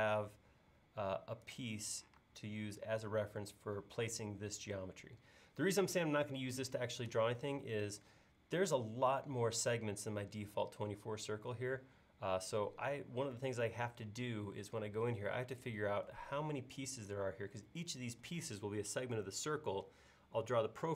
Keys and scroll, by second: 2.2 space.